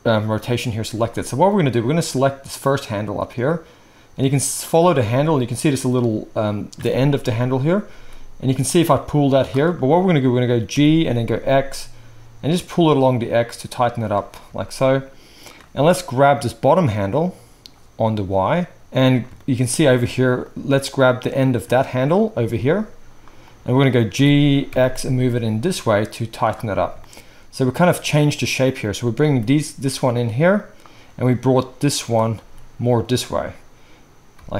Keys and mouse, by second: 2.6 click, 2.7-5.5 middle drag, 5.5 click, 5.6-16.3 middle drag, 7.9 g, 10.7 g, 16.3 click, 16.5-17.1 middle drag, 17.1-20.6 drag, 18.8 ctrl+z, 20.6-31.2 middle drag, 22.4 g, 24.1 g, 29.2 g, 31.2 click, 31.3 middle click, 31.9 click, 32.1-34.5 middle drag, 32.4 g.